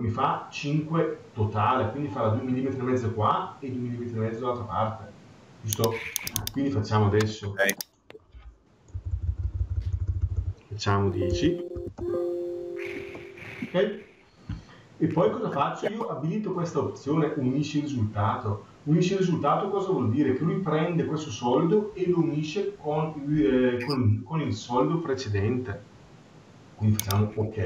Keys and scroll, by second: 8.7 BackSpace, 12.8 Return.